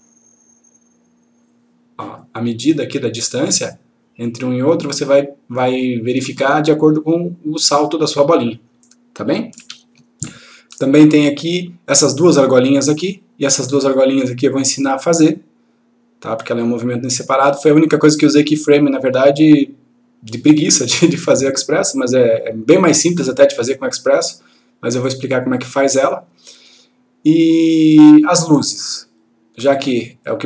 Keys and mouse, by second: 9.6 F1, 11.1-12.1 click, 13.9-16.4 click, 18.2-20.0 click, 28.0 click.